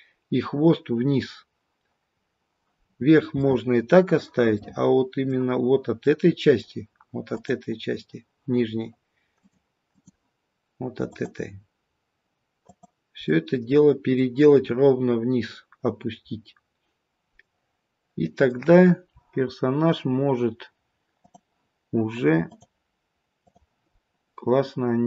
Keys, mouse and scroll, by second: 2.0-2.7 scroll down 1, 2.7-3.4 scroll down 1, 3.4 middle click, 3.4-4.5 scroll up 3, 4.5 middle click, 5.9 middle click, 7.3 click, 9.3 click, 11.6 click, 12.7 click, 13.2 middle click, 14.6-15.6 scroll down 4, 17.3 middle click, 18.6-19.4 scroll up 5, 19.4-20.3 scroll down 1, 21.2 click, 22.4 click, 23.9-24.8 scroll down 1, 24.8-25.0 scroll down 1.